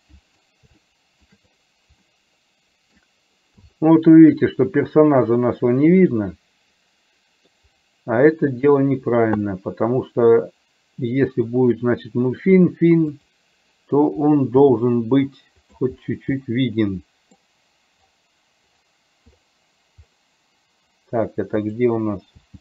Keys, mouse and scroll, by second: 0.9 shift+middle click, 2.1-2.8 scroll up 1, 2.8 middle click, 3.9 shift+middle click, 6.2-7.2 scroll up 1, 7.2 middle click, 9.6-10.3 scroll up 1, 10.3-11.6 middle drag, 14.7 g, 16.6 middle click, 21.7 click.